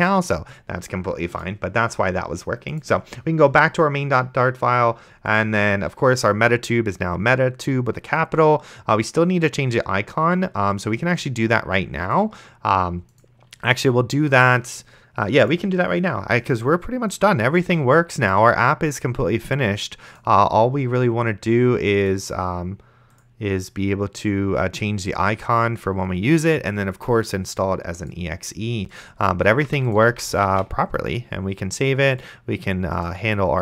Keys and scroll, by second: 17.9 ctrl+s, 29.4-31.2 typing.